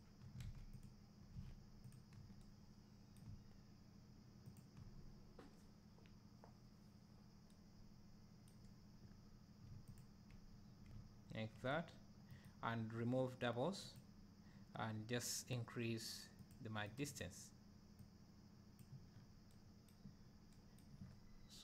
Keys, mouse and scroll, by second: 0.5 ctrl+z, 14.4 e, 16.8-20.1 drag.